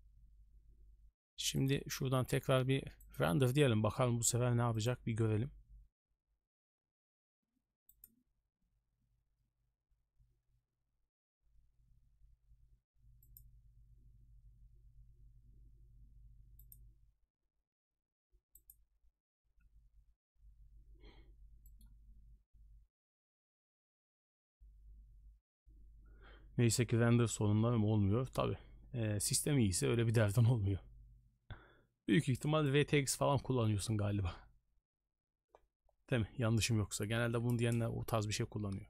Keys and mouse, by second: 1.6-3.2 drag.